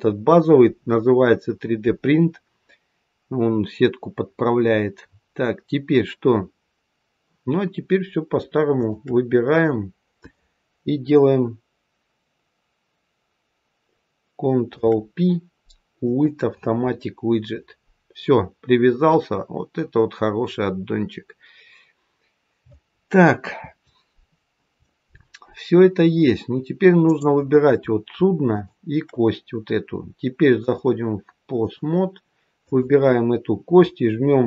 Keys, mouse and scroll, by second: 3.0-3.5 scroll down 2, 3.5-4.1 scroll up 1, 8.6 shift+click, 14.6 ctrl+p, 20.4-21.1 scroll up 4, 21.1-21.9 scroll down 2, 21.9-23.3 scroll down 2, 26.9 click, 28.4 shift+click, 30.5 click, 32.5 click.